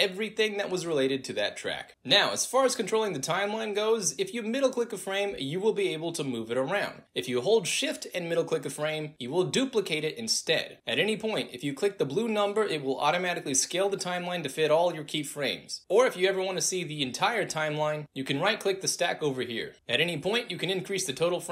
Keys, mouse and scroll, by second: 2.0 right click, 4.0 click, 4.5-5.4 middle drag, 6.8 ctrl+z, 7.8 click, 8.3-8.7 shift+middle drag, 9.3-10.8 drag, 10.8 ctrl+z, 13.0 click, 18.4 right click.